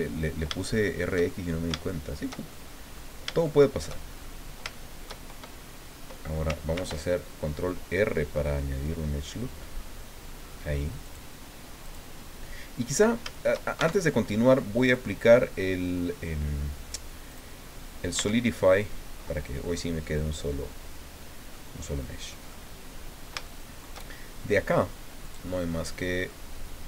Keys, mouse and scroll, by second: 0.7 shift+click, 1.6 shift+click, 2.5 shift+click, 3.4 shift+click, 4.1-4.6 shift+scroll up 3, 4.7 shift+click, 6.7 ctrl+r, 9.7 scroll up 2, 11.1 click, 11.8 click, 13.8 shift+Tab, 14.8 click, 17.3 click, 18.2 Tab, 21.5 middle click, 22.5 middle click, 23.3 shift+click, 25.2-26.5 drag.